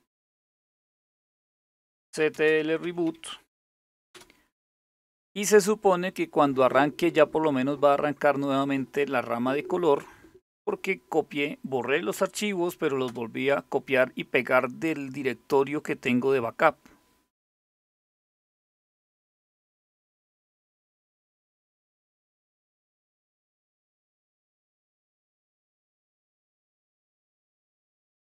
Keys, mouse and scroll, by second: 0.0-3.8 typing, 12.7 Return.